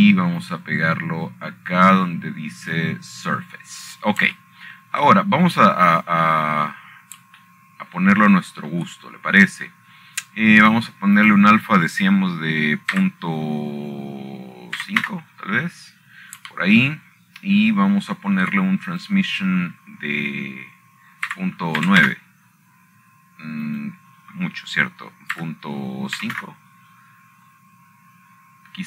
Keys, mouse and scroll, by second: 0.0 click, 1.0 click, 3.1-5.5 drag, 5.7-6.5 drag, 7.7 shift+middle click, 8.1-8.5 scroll up 2, 9.0 scroll down 2, 9.0-9.5 scroll up 8, 10.0-10.5 shift+scroll up 2, 11.5 shift+middle click, 13.9 click, 14.8 click, 15.7 ., 17.5 KP_5, 17.7 Return, 19.5 shift+middle click, 21.1 shift+middle click, 21.6 click, 24.5 KP_9, 24.9 Return, 26.4-27.5 drag, 28.1 KP_Decimal.